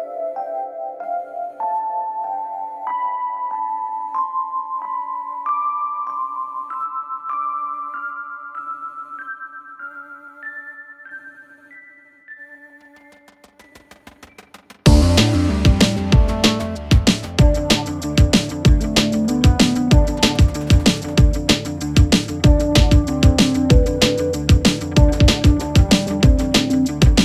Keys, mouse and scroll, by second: 0.2 click, 0.9 alt+scroll up 1, 1.1 space, 1.2 click, 1.5 space, 1.6 alt+scroll up 1, 2.0 click, 4.4-8.2 ctrl+drag, 8.2-8.9 alt+scroll down 1, 9.0-9.3 alt+scroll up 1, 9.3 ctrl+t, 9.5 click, 9.8 space, 10.4-11.0 shift+click, 11.9 alt+scroll down 1, 12.5-13.3 alt+scroll up 2, 14.0-14.4 alt+scroll up 2, 14.5 space, 14.6-15.1 click, 14.9 space, 15.2-15.7 alt+scroll up 2, 16.7-20.1 alt+shift+click, 22.1-23.9 drag, 25.3-27.2 drag.